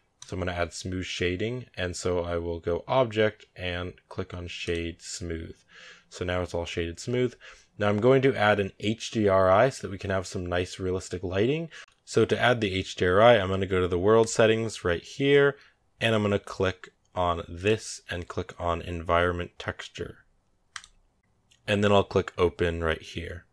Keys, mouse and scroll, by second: 0.0-3.1 drag, 14.1 click, 17.4-20.4 drag.